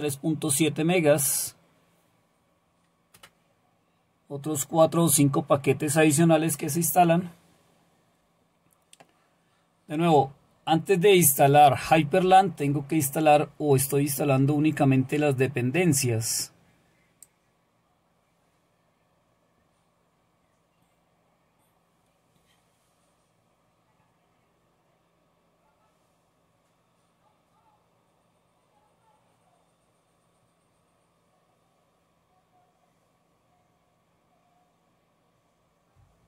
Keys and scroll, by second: 3.2 Return.